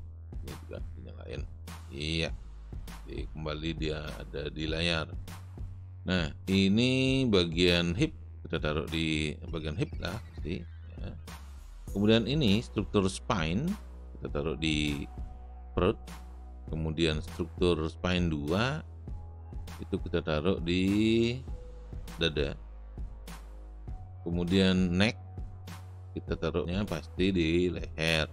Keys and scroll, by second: 3.2 space, 22.2 space, 26.7 space.